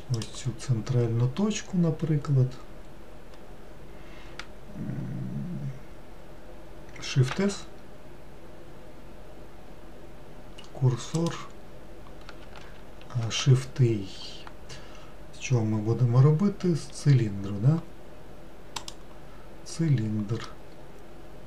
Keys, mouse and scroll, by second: 0.2 click, 7.4 shift+s, 20.6-21.4 middle drag.